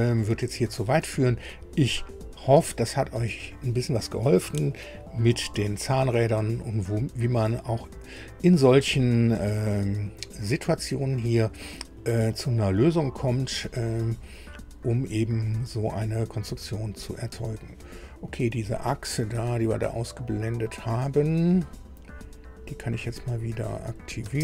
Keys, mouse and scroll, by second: 0.0 click, 1.1 click, 5.9 scroll up 2, 7.2-11.6 drag, 14.9 scroll down 2, 15.4-17.8 drag, 18.6-19.0 scroll up 2, 19.3-19.6 scroll up 2, 19.7 scroll down 2, 20.9-21.2 scroll up 2, 21.6 scroll up 2, 23.9 click, 24.2 space.